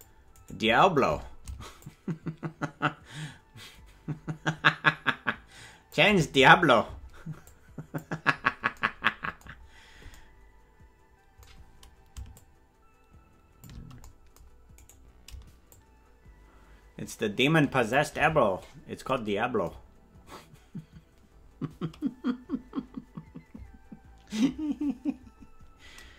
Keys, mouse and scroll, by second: 0.4 right click, 0.7-1.6 scroll down 1, 1.6 shift+scroll up 1, 1.8-6.0 shift+drag, 1.8-2.2 shift+scroll down 1, 7.5-8.7 drag, 12.3-14.0 shift+drag, 14.9 right click, 15.7-18.0 shift+drag, 18.0 shift+scroll up 1, 18.3 scroll down 1, 18.4-18.9 scroll down 4, 18.6 scroll up 1, 18.9 scroll down 1, 19.6-23.7 scroll up 4.